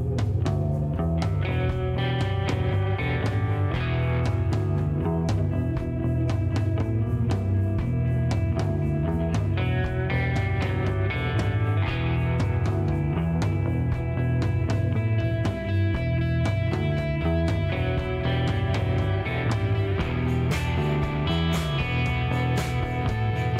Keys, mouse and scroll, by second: 0.4 click, 0.7 right click, 1.7 click, 2.5 middle click, 2.9-3.6 scroll up 6, 3.6 middle click, 4.7 click, 6.6 click, 7.0 click, 7.5 click, 8.6 click, 11.1 click, 14.2 click, 14.4 space, 15.4 right click, 15.9 click, 17.1 middle click, 18.2 click, 18.5 click, 20.2 click, 21.0-21.6 scroll down 4, 21.7 middle click, 22.5 scroll up 2, 22.9 middle click.